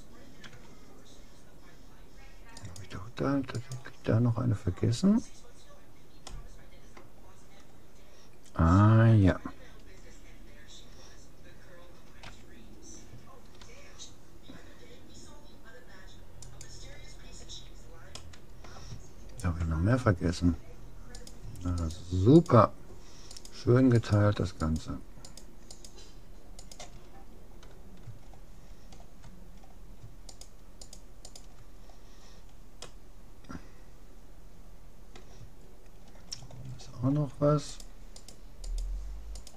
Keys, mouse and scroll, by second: 0.5 Tab, 2.7-5.3 right drag, 5.3-8.1 middle drag, 12.3 a, 13.7 g, 17.5 a, 18.2-20.1 middle drag, 20.1-20.4 scroll down 1, 20.4 scroll up 1, 21.3-28.3 right drag, 27.3-30.3 middle drag, 30.3 click, 30.3-32.9 right drag, 32.7 middle click, 32.9 click, 32.9-34.5 middle drag, 35.7-36.7 scroll up 1, 37.7-39.5 right drag.